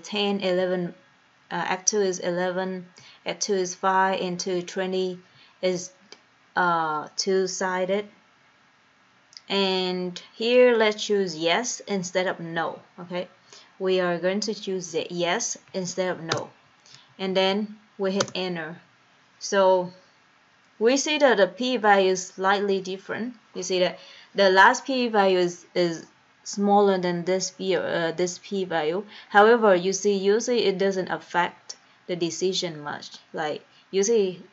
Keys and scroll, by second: 0.0 Down, 0.8 Down, 3.2 Down, 4.2 Down, 5.6 Down, 9.8 Down, 11.7 Down, 13.7 Up, 15.1 Right, 16.4 Return, 17.0 Down, 17.4 Down, 18.2 Return.